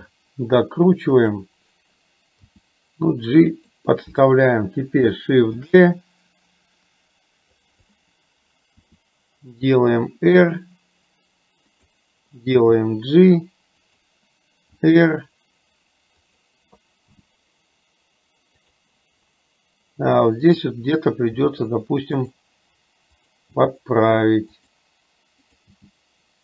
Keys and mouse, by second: 2.5 g, 5.7 shift+d, 8.9 r, 14.9 r, 17.3 g, 20.5 click, 21.5 g, 23.5 g.